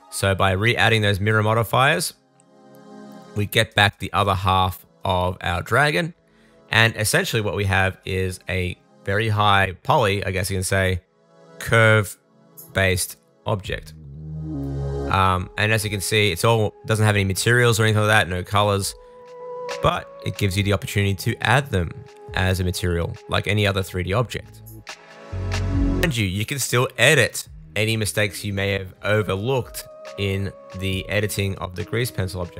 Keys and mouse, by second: 2.1-3.4 drag, 3.4-8.2 middle drag, 8.2-9.7 drag, 9.7-11.4 middle drag, 15.0-16.9 middle drag, 16.9-18.2 drag, 18.2-21.7 middle drag, 21.7 super+s, 23.4 middle click, 24.9 Tab, 25.4-32.5 middle drag.